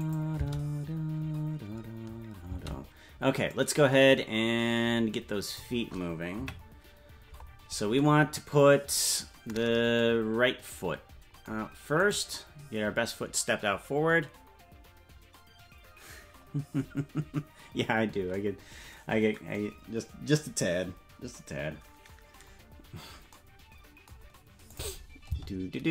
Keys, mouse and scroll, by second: 0.0 click, 0.0 space, 0.3 space, 3.4-5.6 drag, 3.4 space, 6.3 KP_Decimal, 7.0-7.9 scroll down 11, 12.1 right click, 24.6 click, 25.3 space.